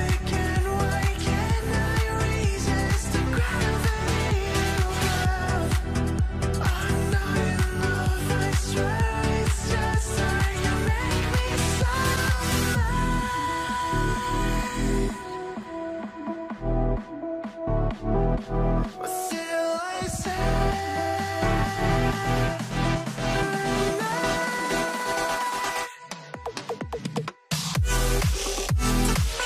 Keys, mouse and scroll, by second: 5.6 middle click, 6.0 scroll down 1, 12.3 scroll down 1, 12.3 double click, 16.1 middle click, 16.6 scroll down 1, 25.0 5, 26.0 middle click, 27.2 double click.